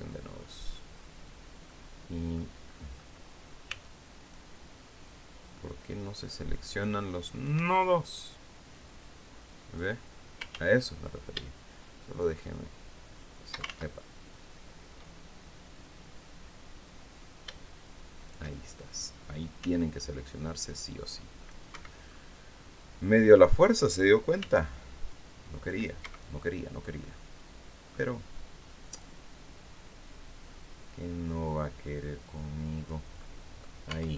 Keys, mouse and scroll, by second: 0.4 scroll down 2, 1.1 click, 2.1 scroll up 2, 3.1 c, 3.8-7.1 drag, 7.0 Escape, 8.2-9.4 drag, 10.0 ctrl+z, 11.7-13.2 shift+drag, 13.1 ctrl+shift+z, 13.8-17.9 drag, 19.1 c, 19.5-21.1 drag, 21.2 Escape, 21.5-21.9 scroll down 1, 23.8 c, 24.6 click, 25.5 Escape, 25.9-26.2 scroll down 1, 26.5-27.5 middle drag, 28.4-32.5 drag, 32.6 middle click, 33.4 Tab, 34.0-34.1 scroll down 2.